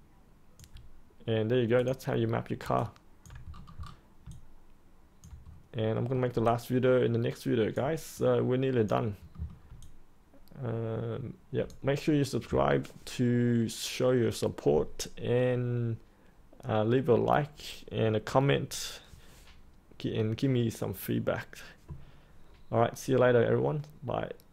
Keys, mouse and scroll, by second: 1.7 click, 2.7 alt+click, 3.4-4.2 scroll down 1, 5.0 alt+click, 5.4 scroll up 1, 5.9 middle click, 6.4 alt+click, 8.1-9.1 drag, 9.3 middle click, 9.7-12.1 alt+drag, 16.2 alt+click.